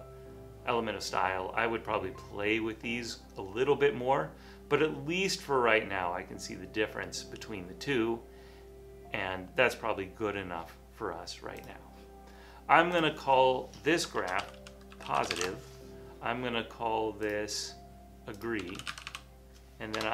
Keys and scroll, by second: 14.1-15.9 typing, 18.2-20.0 typing.